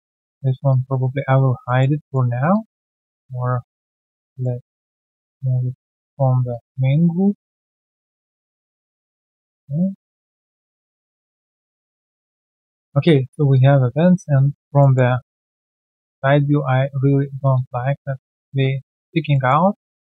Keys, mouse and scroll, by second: 1.6 alt+click, 1.8 middle click, 2.0 alt+click, 2.3 alt+right click, 2.5 alt+click, 3.4 f, 4.4 middle click, 7.5 middle click, 7.7 alt+click, 8.0 alt+right click, 8.2 alt+click, 8.7 alt+middle click, 9.0 alt+click, 10.7 alt+click, 11.2 alt+click, 13.2 alt+middle click, 13.5 alt+click, 14.7 alt+middle click, 15.1 alt+click, 16.6 alt+right click, 18.2 alt+click, 19.3 alt+middle click, 19.9 space.